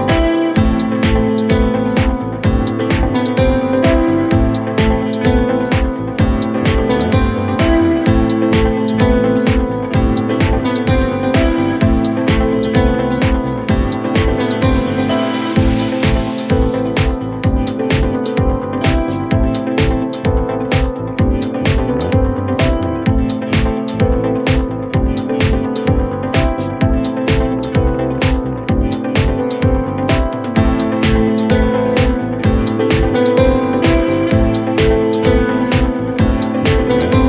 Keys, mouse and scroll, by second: 0.2 click, 2.6 click, 4.4 click, 5.4-6.3 typing, 7.3 click, 7.4-8.2 typing, 9.4 click, 11.7 click, 12.2 click, 12.4 click, 13.2 click, 13.8 click, 19.5 click, 23.4 ctrl+d, 24.5 right click, 25.3 click, 25.7-27.6 typing, 27.9 Return, 29.3 click, 30.1-31.8 typing, 30.8 click, 32.7 click, 33.2-34.8 typing, 36.6 click, 36.9 click.